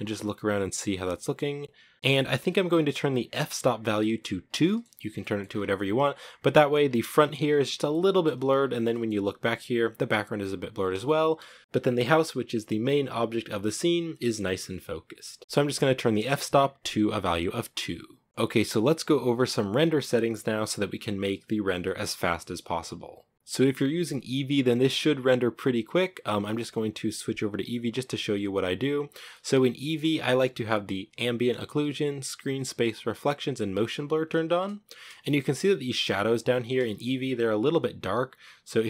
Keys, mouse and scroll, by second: 1.9-4.8 shift+middle drag, 4.8-5.7 shift+scroll up 5, 4.9 shift+middle click, 6.5 scroll down 3, 6.9 shift+middle click, 7.5 scroll down 2, 7.6-8.1 shift+middle drag, 8.1-8.5 scroll up 7, 8.6-11.6 shift+middle drag, 18.2 t, 21.6 scroll up 10, 26.5-28.9 drag, 28.9-29.2 scroll down 1, 29.2 shift+middle drag, 29.5 scroll up 1, 29.7-35.3 shift+middle drag, 35.3-36.3 scroll up 3, 36.3-36.7 scroll up 1, 36.7 shift+middle drag, 37.0-38.7 scroll up 5, 38.7 right click.